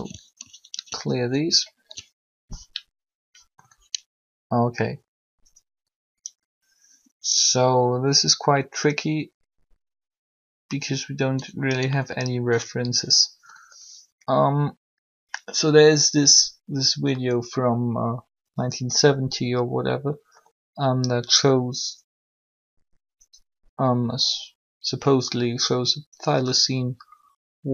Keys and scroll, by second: 0.7 alt+g.